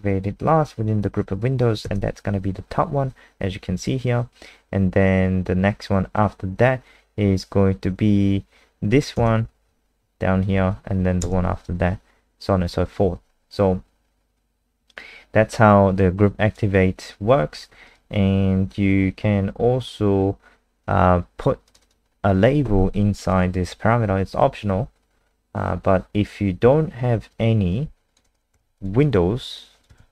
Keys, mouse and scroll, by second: 1.8 KP_0, 16.0 click, 17.5-17.8 scroll down 2, 17.8 click, 21.8 click, 25.9 scroll down 2, 27.3 click, 28.6 ctrl+c, 28.8 click, 29.0 click, 30.0 ctrl+v.